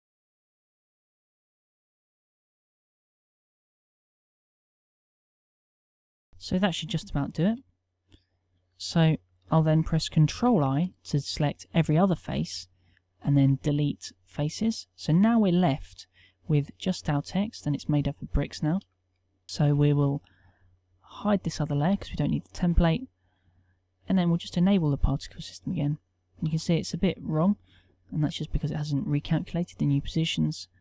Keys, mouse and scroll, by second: 10.3 ctrl+i, 12.5 Delete, 17.0 Tab, 26.6 z.